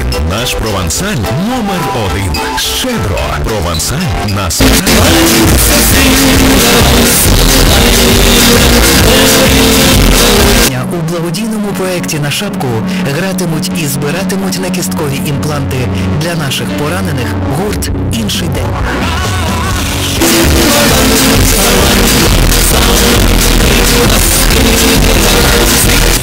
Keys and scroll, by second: 10.7 Page_Down.